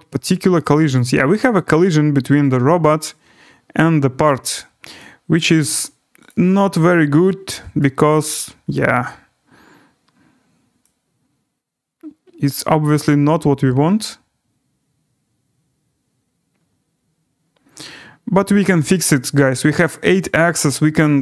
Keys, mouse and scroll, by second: 0.2 right click, 0.4 scroll down 5, 1.3 right click, 3.0 scroll, 5.3 click, 6.3 click, 8.2 right click, 8.7 scroll down 3, 9.2 scroll up 3, 11.3 scroll.